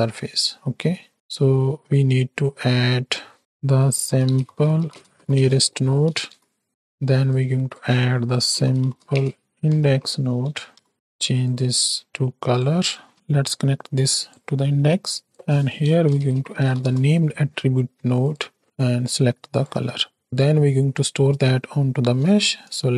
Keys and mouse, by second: 0.1 middle drag, 1.0 middle click, 3.1-6.7 drag, 7.2-10.9 drag, 11.4-12.5 drag, 13.5-14.4 drag, 14.5 middle click, 15.2-18.4 drag, 18.6-19.7 drag, 20.2 middle click, 22.4 shift+a.